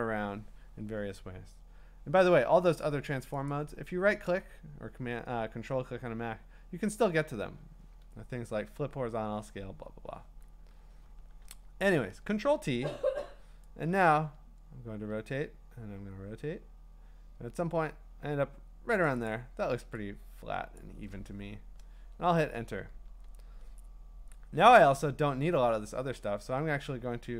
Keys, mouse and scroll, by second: 3.5-6.6 right drag, 9.6 Escape, 13.7-14.7 drag, 19.0 click, 20.8 click, 21.9 Return, 24.6 c.